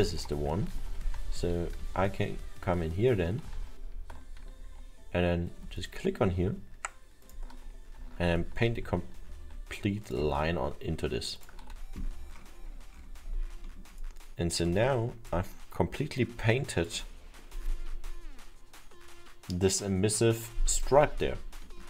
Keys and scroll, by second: 0.8 ctrl+z, 1.9 ctrl+z, 6.6 ctrl+y, 9.2 ctrl+z.